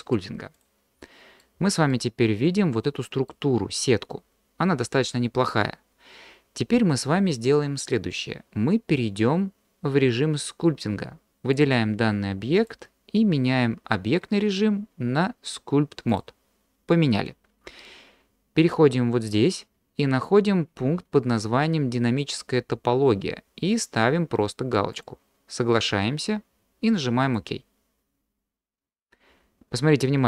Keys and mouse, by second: 1.0 middle click, 1.9-3.3 middle drag, 11.6 drag, 12.7-16.3 drag, 24.9-28.4 drag.